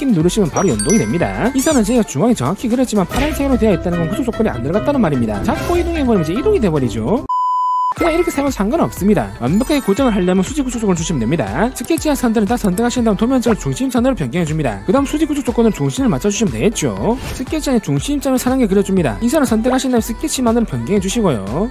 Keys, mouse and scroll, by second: 0.5 click, 8.7 click, 9.3 click, 10.0 click, 10.8 click, 11.6 click, 11.9 click, 12.8 shift+click, 13.5 click, 14.2 click, 14.8 click, 14.9 click, 15.3 click, 15.8 click, 16.4 click, 16.9 click, 17.9 1, 18.4 click, 19.2 click, 19.4 click, 20.4 click, 21.4 click.